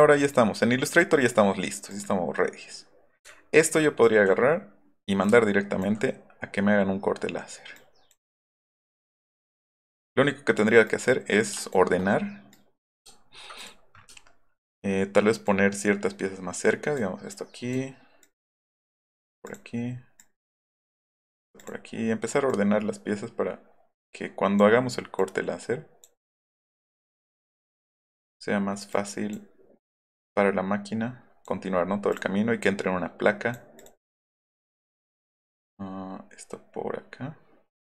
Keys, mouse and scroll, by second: 1.9 click, 3.2 alt+click, 5.2 alt+right click, 7.8 click, 8.8 click, 9.4 click, 10.8 click, 12.5 click, 13.6 click, 15.4-17.0 drag, 17.3 click, 18.2-19.3 drag, 19.4 click, 20.2-21.4 drag, 21.6 click, 22.5-24.6 drag, 25.2 click, 26.2 click, 26.9-28.2 drag, 28.9 click, 29.8-31.4 drag, 32.1 click, 32.6 click, 33.8 click, 34.3-37.8 drag.